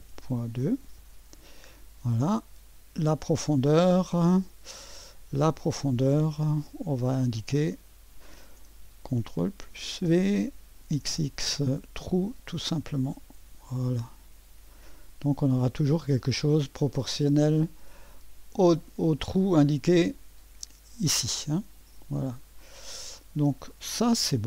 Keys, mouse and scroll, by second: 0.0-0.5 typing, 1.0 Return, 6.1-8.9 drag, 9.5 ctrl+v, 10.9 typing, 12.9-14.5 drag, 15.9 click, 19.0-19.7 drag, 20.0-20.9 drag, 22.0 click, 22.4 typing, 22.7 middle click, 23.6-24.4 drag.